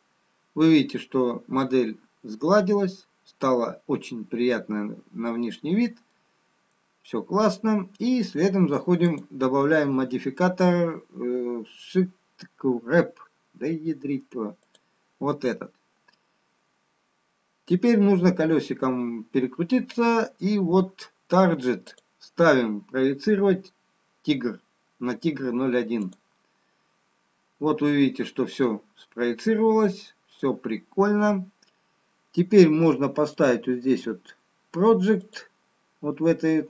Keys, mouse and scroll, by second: 1.2-2.9 scroll up 2, 2.9 middle click, 2.9-3.2 scroll down 1, 8.3 scroll down 1, 9.6 click, 16.9-18.4 scroll down 2, 19.2-21.9 scroll down 4, 22.4 click, 28.6-29.9 scroll up 2, 30.1 middle click, 31.7-33.2 scroll down 2, 34.0 click.